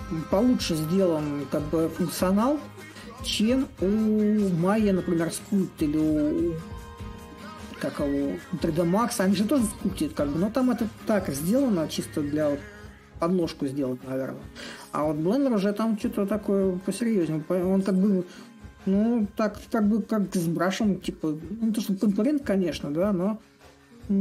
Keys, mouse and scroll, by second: 0.0-5.0 drag, 5.9-10.9 drag, 12.8-17.8 drag, 19.2-24.2 drag.